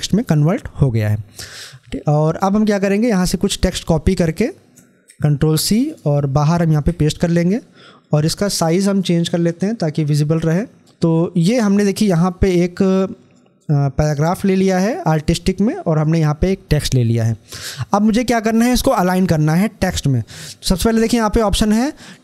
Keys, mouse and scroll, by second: 1.0 scroll up 1, 2.0-4.9 drag, 4.9 ctrl+c, 5.7 click, 7.9-18.2 drag, 21.8 click.